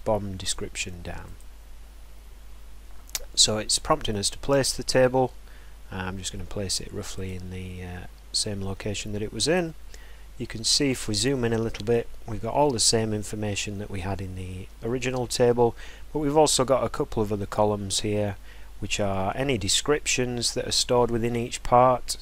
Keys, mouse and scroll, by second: 1.3 click, 7.2 click, 9.6-10.2 scroll, 10.6 scroll, 11.7 scroll.